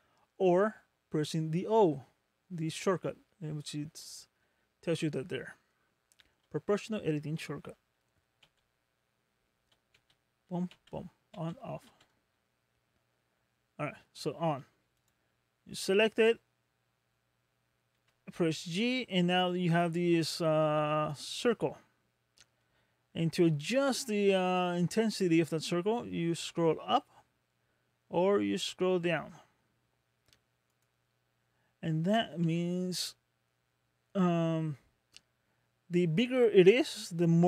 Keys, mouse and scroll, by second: 8.5 o, 10.0 o, 10.7 o, 11.4 o, 12.0 o, 15.0 click, 15.6-16.1 scroll down 6, 16.4 scroll up 2, 18.0 g, 31.1-31.5 scroll up 6, 32.5 g.